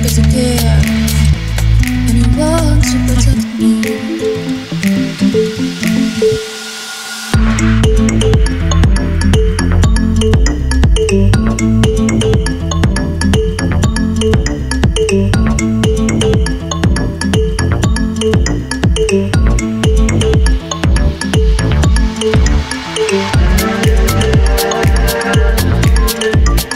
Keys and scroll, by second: 0.0 super+s, 15.6-16.5 typing.